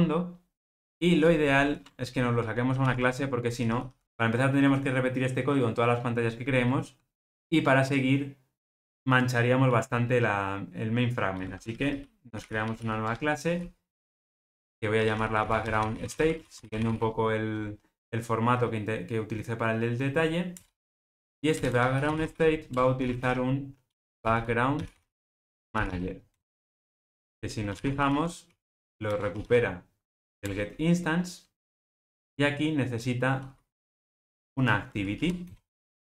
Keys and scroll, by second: 2.8 super+n, 22.8 Return, 29.3 Return, 31.9 Return.